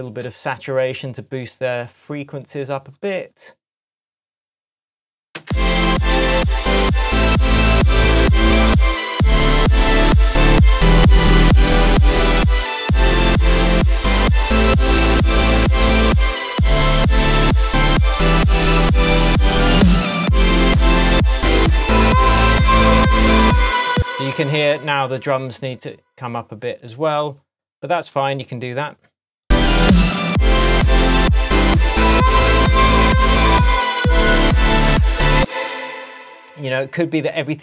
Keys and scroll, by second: 5.4 space, 6.1 super+space, 23.9 space, 35.3 space, 35.8 super+z.